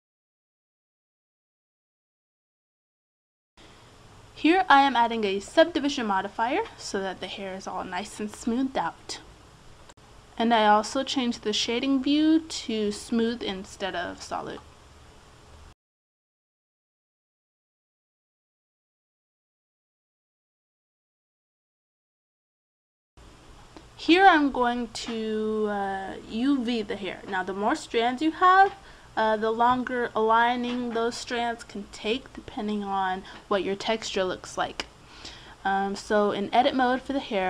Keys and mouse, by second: 0.1 middle click, 0.4 right click, 1.7 right click, 2.2 click, 2.2 right click, 2.3 middle click, 2.4 click, 2.5 middle click, 2.6 click, 3.3-5.0 drag, 8.1-9.9 drag, 10.3-11.7 drag, 12.3 Tab, 13.7-15.0 drag, 14.8 Tab, 17.1 Tab, 20.8-22.3 middle drag, 22.3 click, 23.1-26.9 drag, 26.9 Tab, 28.4 Tab, 29.3 Escape, 32.5-36.8 drag.